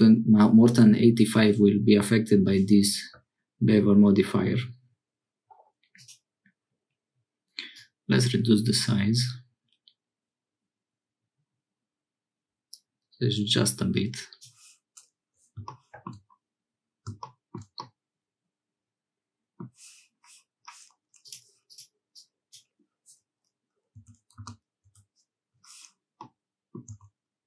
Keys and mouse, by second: 5.9 click, 7.8-14.4 drag, 17.8-19.7 middle drag, 21.2-25.6 drag, 26.2 middle click, 26.9 Tab.